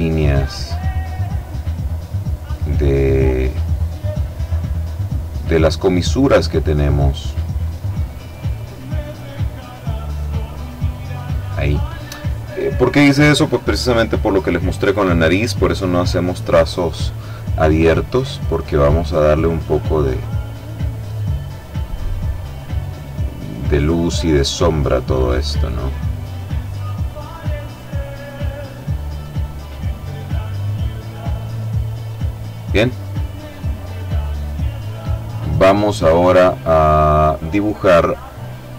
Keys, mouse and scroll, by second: 2.1 click, 3.1-4.1 drag, 4.3-5.7 drag, 7.1 click, 8.3 click, 9.9 click, 17.6 click, 19.1 click, 20.9 click, 21.8 click, 22.5 click, 23.6 click, 27.5 click, 28.6 click, 29.4 click, 31.3 click, 33.0-36.9 middle drag, 37.6 click.